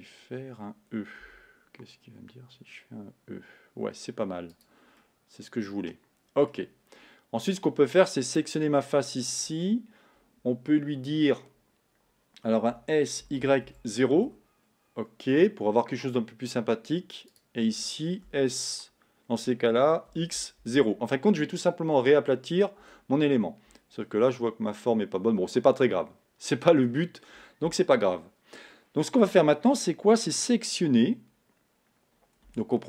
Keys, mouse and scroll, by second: 1.3 e, 5.0-8.6 middle drag, 8.6 click, 13.0 s, 15.8-17.4 middle drag, 17.4 click, 18.5 s, 24.4-27.0 middle drag, 27.0-29.5 scroll up 1, 32.7 Tab.